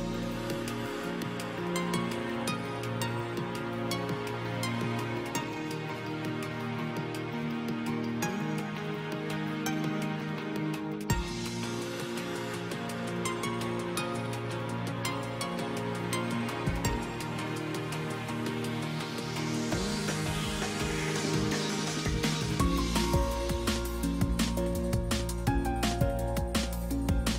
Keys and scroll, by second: 10.5 space, 18.9 space.